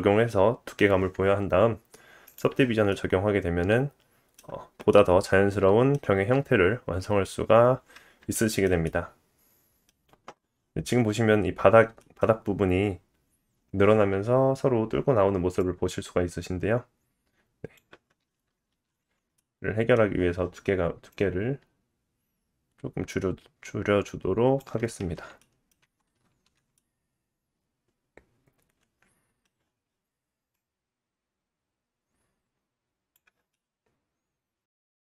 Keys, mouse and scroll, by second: 2.2 click, 2.9 middle click, 3.6-7.9 drag, 4.9 middle click, 7.1-7.9 scroll down 2, 8.3 shift+middle click, 8.7-10.2 drag, 8.8 middle click, 11.4 scroll up 1, 11.9-12.2 shift+drag, 12.2-15.6 middle drag, 15.6 click, 18.7 alt+z, 18.9-21.1 middle drag, 21.1 click, 25.0 Tab, 25.6-26.4 middle drag, 25.8 Tab, 26.4 alt+z, 26.6 middle click, 27.0-29.4 middle drag, 29.8-33.5 drag, 33.5 middle click.